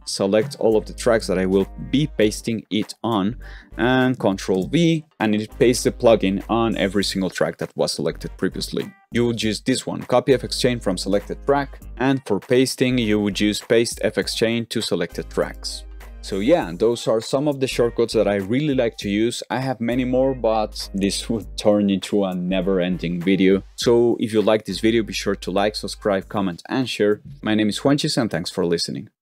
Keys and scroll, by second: 4.4 ctrl+v, 11.8 ctrl+v, 16.0 super+a, 16.0 z.